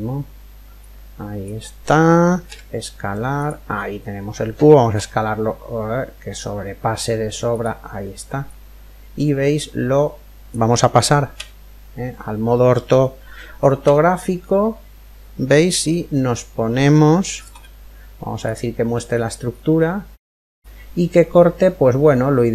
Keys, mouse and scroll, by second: 0.6 click, 2.1 s, 4.5 s, 8.1 click, 18.1 z, 18.7-20.8 middle drag, 20.2 click, 20.8 scroll up 1.